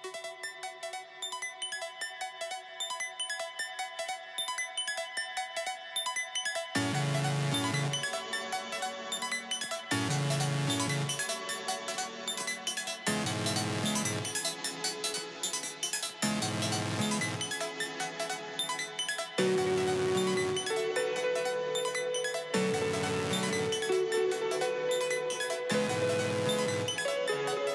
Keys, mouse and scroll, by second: 0.3 j, 0.5-0.9 scroll up 14, 1.3 scroll down 12, 1.6-1.9 scroll up 2, 2.1-2.6 scroll up 6, 2.6 scroll down 6, 2.8 scroll up 3, 3.6 scroll down 10, 3.8 j, 4.1 j, 4.5 scroll down 10, 5.1-6.1 scroll up 15, 6.1 j, 6.4 j, 6.6-9.1 scroll down 6, 9.2 j, 9.4 scroll down 3, 9.6 j, 9.6-10.0 scroll up 12, 10.3-10.6 scroll down 10, 11.9 j, 12.0-12.4 scroll down 5, 12.4 scroll up 12, 13.9 j, 14.1 j, 14.7 j, 14.8-15.4 scroll up 4, 15.4-15.8 scroll down 10, 16.1 j, 16.2 scroll up 5, 19.3 scroll down 7, 19.5-20.2 scroll up 5, 20.2 j, 20.6-21.7 scroll up 2, 21.7-22.3 scroll down 1, 22.3 double click, 22.8-23.2 scroll down 7, 23.0-26.1 typing, 23.6 scroll down 3, 25.1 scroll up 6, 25.6 scroll down 4, 26.2-26.9 scroll down 2, 27.2 j.